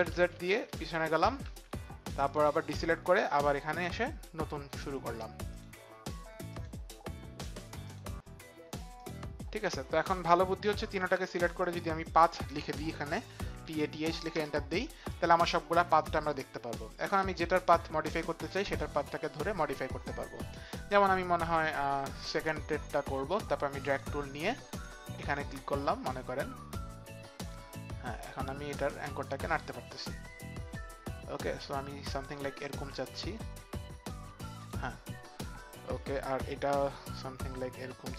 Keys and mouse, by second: 0.1 ctrl+z, 0.6 ctrl+z, 1.4 ctrl+z, 2.2 click, 5.5 click, 6.5 click, 7.8 click, 19.1 click, 22.2 click.